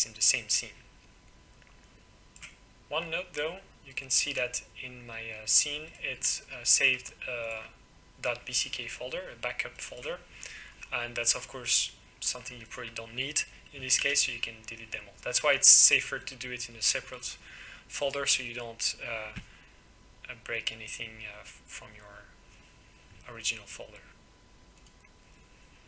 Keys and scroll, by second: 14.0 Delete.